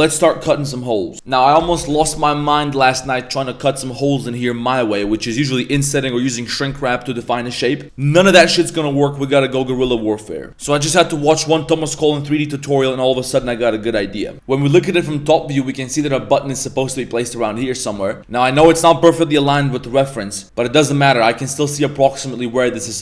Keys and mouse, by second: 2.8 middle click, 4.0 middle click, 11.3 middle click, 12.7 right click, 14.3 Tab, 14.3 a, 14.3 z, 14.5 KP_7, 14.8 z, 17.9 z, 18.2 z.